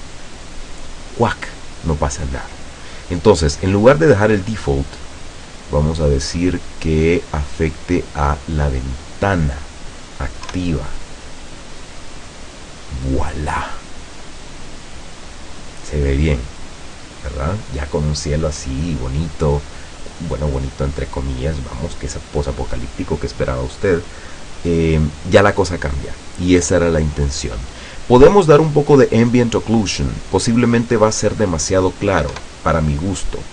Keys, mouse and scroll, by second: 5.1 click, 9.1 click, 10.6 F12, 30.2 click, 32.4 F12.